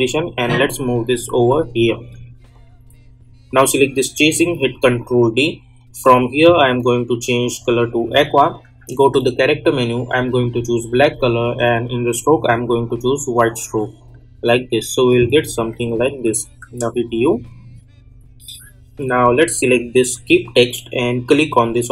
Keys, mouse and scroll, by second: 4.8 ctrl+d, 6.0 click, 15.7 click, 16.4 u, 20.1-21.9 drag.